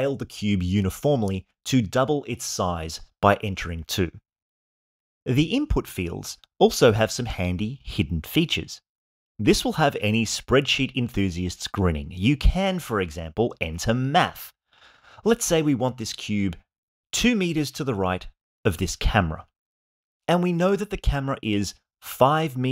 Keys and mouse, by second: 2.6 click, 19.2 click.